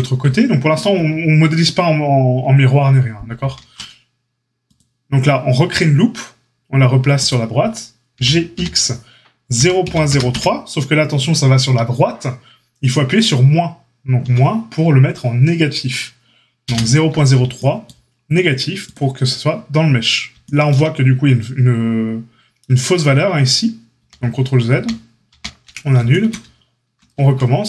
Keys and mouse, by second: 3.3 ctrl+r, 8.1 g, 23.9 ctrl+z, 24.7 ctrl+z, 25.3 ctrl+z, 27.1 Tab.